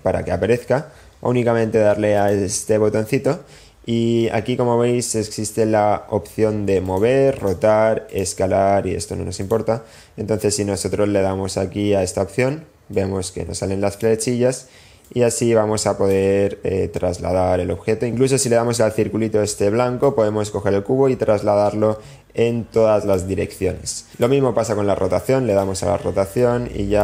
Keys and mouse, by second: 2.0 click, 6.7-7.5 drag, 8.0 click, 9.4 click, 13.3-14.3 drag, 15.0 click, 16.3-17.4 drag, 19.2-23.6 drag, 25.3 click, 26.3 click.